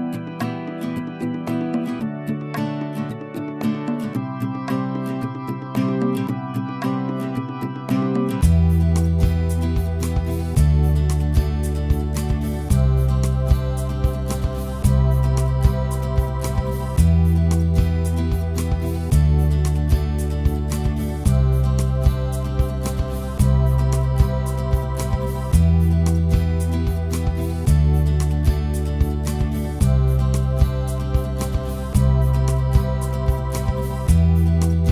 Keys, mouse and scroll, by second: 11.6-14.1 alt+right drag, 14.1 f, 14.5 click, 14.9 alt+right click, 15.4 ctrl+z, 16.1 click, 16.9 right click, 17.2-18.5 drag, 18.5 ctrl+z, 18.9 right click, 19.3 click, 20.2 alt+middle click, 20.3 alt+click, 20.4 alt+right click, 20.9 ctrl+z, 21.6 click, 22.3 alt+middle click, 22.6-24.1 drag, 24.1 ctrl+z, 24.5-26.4 drag, 26.4 ctrl+z, 26.6 click, 27.5 ctrl+z, 27.6 click, 28.3 ctrl+z, 28.4 ctrl+click, 29.0 alt+right click, 29.1 alt+click, 29.7 ctrl+z, 30.0-31.0 alt+drag, 31.0 alt+right click, 31.2 click, 31.8 ctrl+z, 32.1 click, 32.6 ctrl+z, 32.7 ctrl+click, 33.1 ctrl+z, 33.6 click, 34.4 ctrl+z.